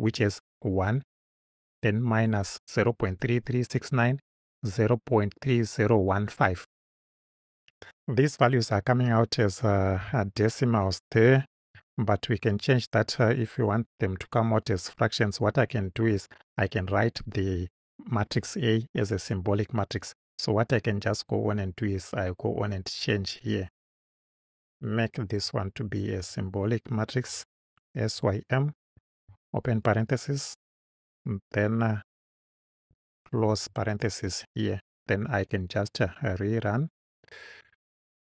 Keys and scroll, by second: 25.9 s, 26.2 y, 27.3 m, 29.0 shift+9, 29.9 shift+Right, 32.2 Right, 32.9 shift+Right, 33.4 shift+0.